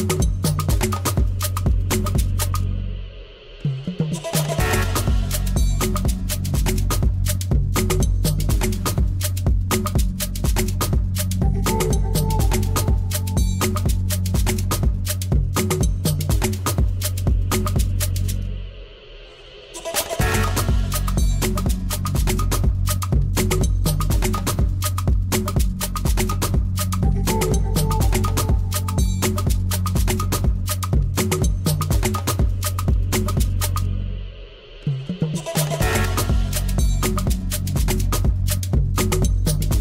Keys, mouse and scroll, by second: 3.5 l, 4.0 l, 4.5 l, 6.0 l, 6.6 l, 10.1-13.7 drag, 14.1 click, 15.3 k, 16.0 j, 17.3 h, 18.5 l, 18.9 l, 19.4 l, 19.7 l, 21.1-22.9 drag, 23.3 click, 24.4-27.2 typing, 28.6 click, 29.7-32.6 drag, 34.4 click, 35.8 h, 37.2 l, 37.7 l, 38.1 l, 38.5 l.